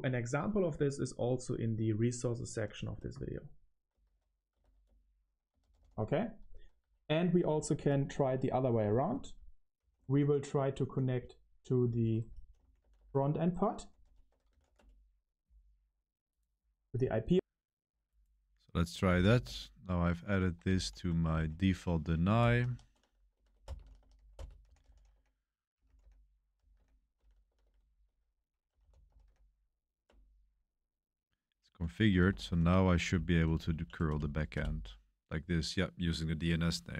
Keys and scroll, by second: 0.4 Return, 0.9-15.5 typing, 15.5 Return, 18.8-29.3 typing, 30.0 Return, 32.2 ctrl+r, 33.1 Page_Up, 33.2 Page_Up, 33.4 Page_Up, 33.5 Page_Up, 34.0 Page_Up, 34.0 Return, 34.5 Return.